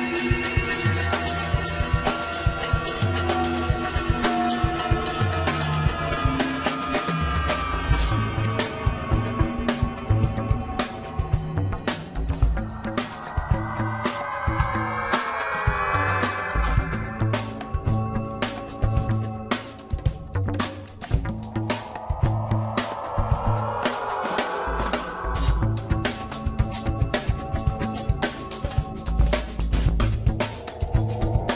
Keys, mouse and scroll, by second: 0.3 scroll up 1, 0.5-0.9 shift+middle drag, 0.9 click, 1.2 click, 1.5 Tab, 1.7 scroll up 2, 2.4 ctrl+r, 4.2 ctrl+r, 6.3 alt+shift+click, 7.0 ctrl+b, 8.6 Tab, 8.8-9.2 scroll down 10, 9.6 KP_1, 10.7 click, 11.5-12.5 scroll up 2, 12.5-14.9 shift+middle drag, 14.9 scroll up 2, 15.7-16.7 middle drag, 16.7 Tab, 17.5-18.3 shift+middle drag, 18.3 click, 18.8 Tab, 19.4-20.1 scroll up 5, 20.1-21.8 shift+middle drag, 21.8 shift+z, 22.3 scroll up 1, 23.9 click, 24.5 scroll down 2, 25.8 click, 27.2-29.8 middle drag, 29.8 shift+z.